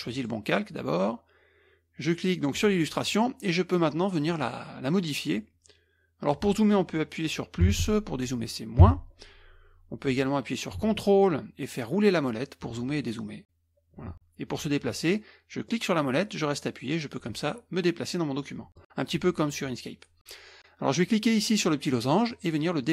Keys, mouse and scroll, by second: 0.1 click, 2.5 click, 7.6 KP_Add, 7.8 KP_Add, 8.8 KP_Subtract, 11.9-12.3 ctrl+scroll up 2, 12.3-12.9 ctrl+scroll down 2, 12.9-13.6 ctrl+scroll up 2, 13.6-14.2 ctrl+scroll down 2, 15.7-19.0 middle drag, 22.3-22.9 drag.